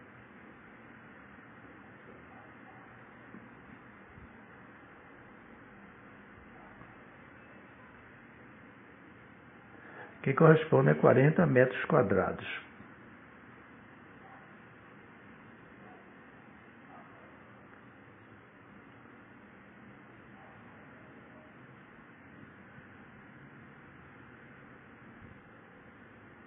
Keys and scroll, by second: 0.0-1.3 typing, 3.7 BackSpace, 4.7 a, 5.3 o, 13.3 4, 14.7 0, 15.9 Right, 18.2 m, 18.6 2.